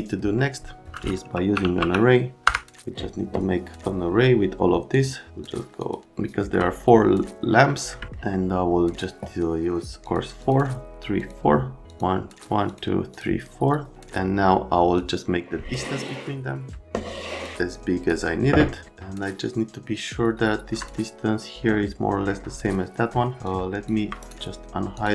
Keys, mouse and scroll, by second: 1.1-2.5 typing, 4.9 click, 5.4 click, 5.8 click, 6.1 middle click, 7.7 right click, 8.0 right click, 8.1 right click, 10.0 middle click, 10.4 click, 11.2 click, 11.9 click, 12.4 click, 13.1 click, 14.9 click, 18.9 right click, 23.4 click, 24.2 scroll up 2, 24.9 click.